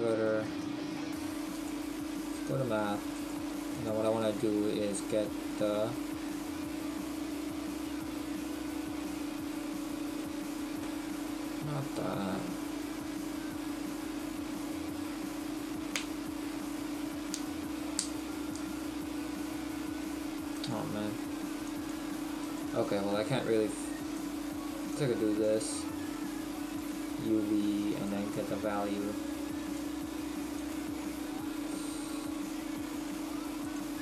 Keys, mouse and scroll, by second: 2.6 click, 25.0 click, 28.1 click, 31.1 click.